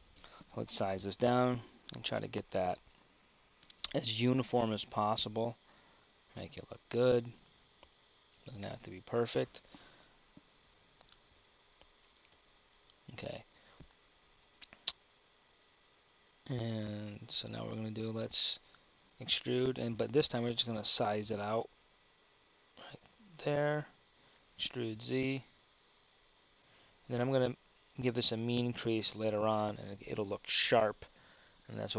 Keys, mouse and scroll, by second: 19.3 e.